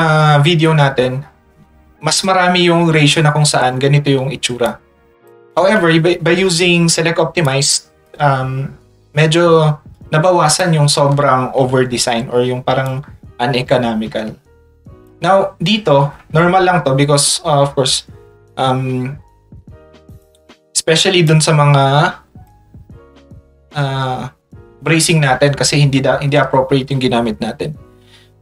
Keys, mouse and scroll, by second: 1.3 click, 4.7 click, 7.4 ctrl+click, 9.9 click, 12.8 ctrl+click, 21.3-22.5 drag.